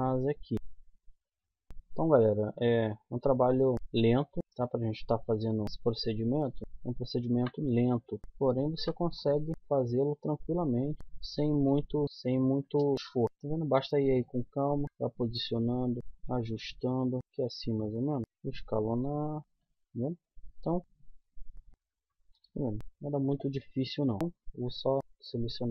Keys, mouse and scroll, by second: 0.5 g, 2.0 r, 4.0 middle click, 5.2-9.3 typing, 10.4-11.7 drag, 11.0 s, 12.1 s, 13.1 s, 13.5 g, 14.8 a, 15.2 middle click, 16.0 ctrl+r, 18.2 s, 19.1 g, 19.4 a, 19.4 c, 20.9-23.1 typing, 24.2 a, 25.4-25.7 middle drag.